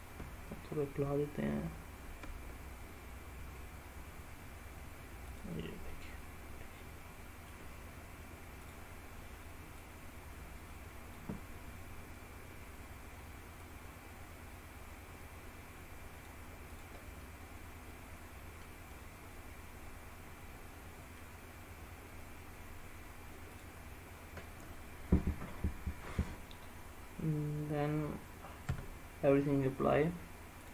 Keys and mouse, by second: 1.1 ctrl+a, 5.4 click, 6.0-7.6 middle drag, 8.7 click, 9.9-11.2 drag, 13.7-16.4 drag, 17.3-18.8 middle drag, 19.0-20.5 middle drag, 20.7 middle click, 28.8 Tab.